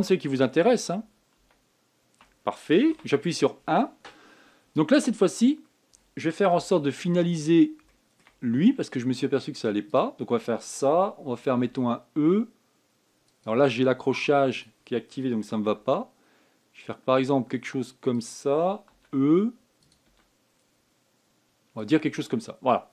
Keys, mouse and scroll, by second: 0.6 ctrl+z, 1.0 ctrl+z, 1.4 ctrl+z, 1.8 ctrl+z, 2.1 ctrl+z, 3.7 KP_1, 6.4-7.4 scroll up 2, 7.4 shift+middle click, 8.1-8.6 scroll up 5, 8.6 shift+middle click, 9.2 scroll up 2, 10.6 click, 12.4 e, 15.3 click, 16.4 g, 19.7 e, 20.8 e.